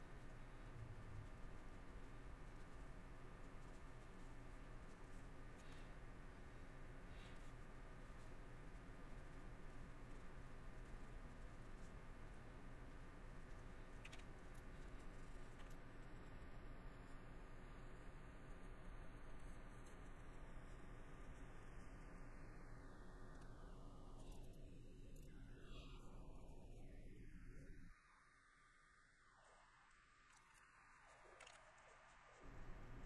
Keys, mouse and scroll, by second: 2.2 middle click, 2.9 middle click, 4.3 middle click, 5.2 middle click, 5.7 shift+middle click, 7.7 middle click, 8.2 middle click, 8.8 middle click, 9.9 middle click, 10.3 middle click, 11.9 middle click, 13.6 middle click, 14.4 middle click, 15.7 scroll, 15.8 middle click, 17.1 middle click, 18.0 middle click, 20.8 middle click, 21.4 middle click, 22.2 middle click, 22.9 middle click, 24.5 scroll, 24.7 middle click, 25.1 scroll, 25.2 middle click, 26.8 middle click, 27.7 middle click, 30.1 middle click, 30.7 middle click.